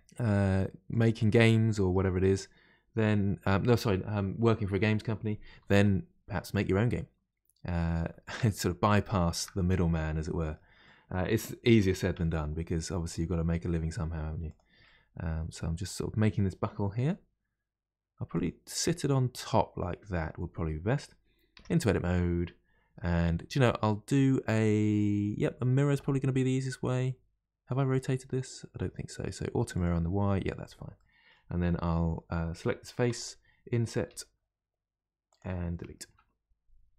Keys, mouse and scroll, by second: 1.3-4.3 middle drag, 5.5 s, 6.9-8.6 middle drag, 8.6-9.1 scroll up 2, 9.1-11.8 shift+middle drag, 11.8 r, 14.8-16.9 middle drag, 16.9 g, 18.8-21.6 middle drag, 21.6 Tab, 23.2-26.2 middle drag, 29.7 click, 30.9-33.1 middle drag, 33.1 3, 33.2 click, 34.1 i, 36.1 Delete.